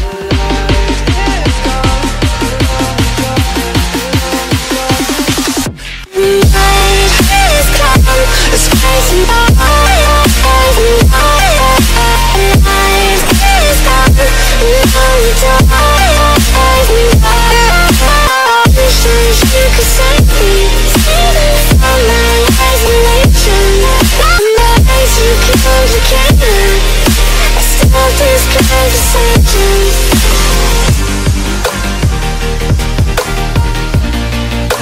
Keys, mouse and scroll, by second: 0.1 scroll down 1, 0.5 middle click, 1.5 middle click, 2.9 click, 5.5 click, 6.4 click, 7.0 middle click, 7.7 click, 8.5 click, 9.9 click, 10.6 click, 13.1 click, 14.5 shift+click, 15.6 click, 16.5-19.5 drag, 21.7-25.8 drag, 25.8 middle click, 26.1-27.1 drag, 28.1 click, 28.6 z, 29.3 middle click, 32.2 click.